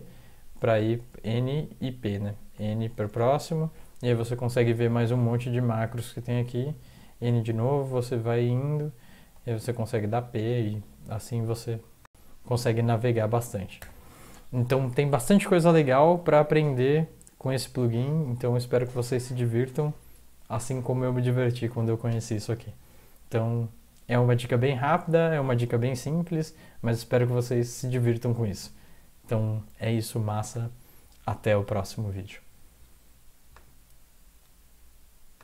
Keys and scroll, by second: 2.5 n, 5.6 n, 9.3 p, 13.8 n.